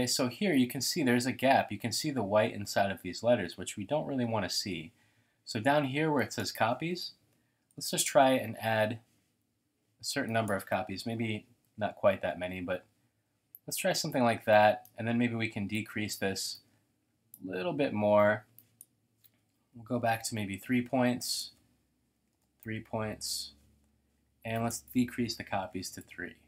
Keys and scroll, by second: 7.4-8.6 typing, 11.2-12.2 typing, 19.5-20.6 typing, 21.9-23.1 typing, 25.7 typing, 26.0 Tab.